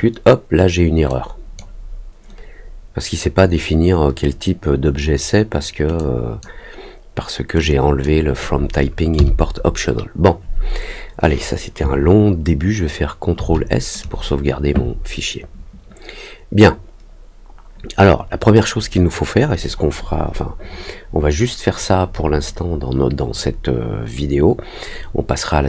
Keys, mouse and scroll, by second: 1.0 click, 5.9 click, 7.5 click, 16.6 middle click, 16.6 scroll up 1, 16.7-17.3 scroll down 2, 17.1 middle click.